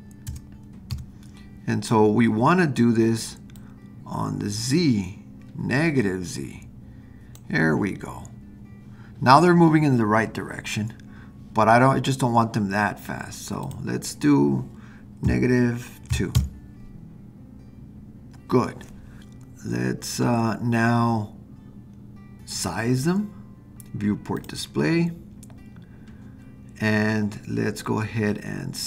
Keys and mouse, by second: 3.6-7.4 drag, 13.6-19.0 drag, 24.4 click.